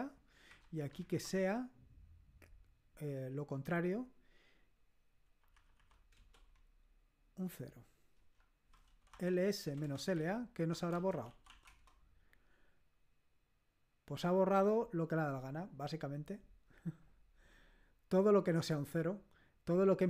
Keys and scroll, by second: 5.2 Delete, 5.5 Delete, 6.0 Delete, 6.1 0, 8.2 Return, 8.7-11.9 typing.